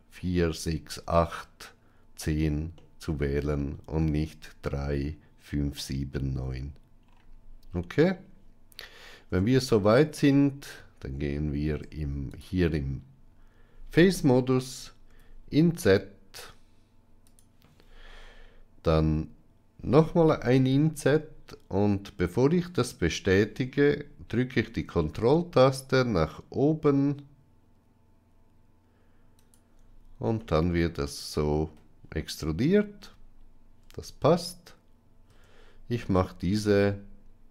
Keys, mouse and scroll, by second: 2.8 middle click, 9.2 Tab, 10.3-11.2 middle drag, 11.6 Tab, 12.2 click, 15.0 i, 20.6 i, 30.3-32.7 middle drag, 33.7 Tab, 35.2 Tab, 36.4 alt+click.